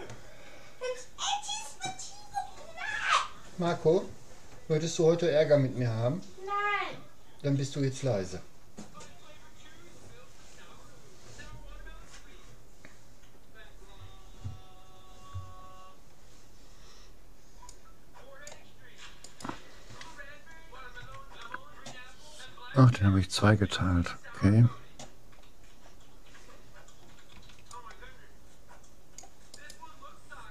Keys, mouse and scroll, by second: 17.7-19.3 drag, 19.3-20.9 right drag, 21.1 Tab, 25.5-27.7 middle drag, 27.5 c.